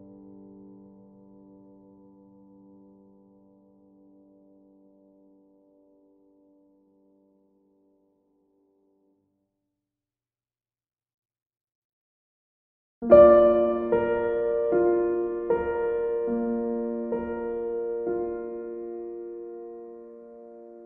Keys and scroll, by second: 20.6 b.